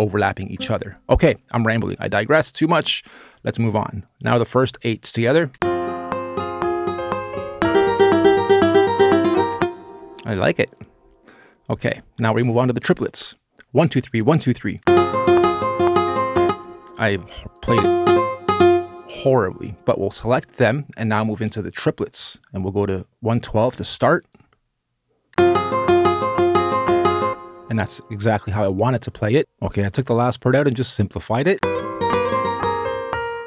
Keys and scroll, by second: 5.3 space, 9.3 space, 14.5 space, 16.2 space, 25.1 space, 27.0 space, 31.3 space, 33.2 space.